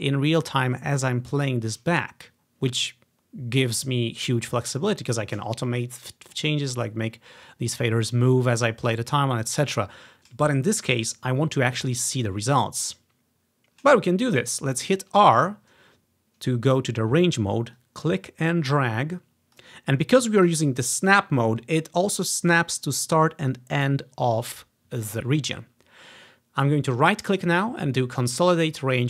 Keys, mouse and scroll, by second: 6.4 click, 8.6 click, 9.3-11.1 drag, 15.3 r, 17.9-19.7 drag, 27.0-29.0 right drag.